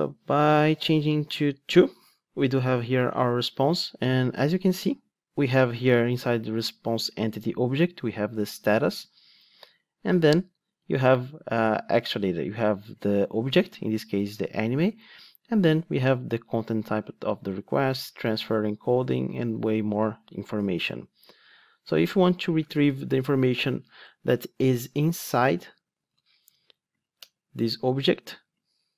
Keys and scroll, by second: 26.0 super+d.